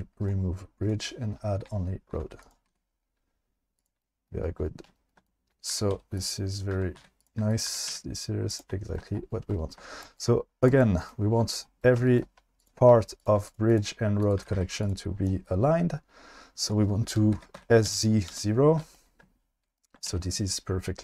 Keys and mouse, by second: 2.1 1, 2.5 click, 2.7 e, 5.7-7.9 typing, 6.2 click, 7.6 click, 13.6 right click, 14.2 click, 14.4 g, 14.6 g, 14.8 click, 17.3 s, 17.6 z, 17.9 KP_0, 18.3 Return, 20.1 alt+z.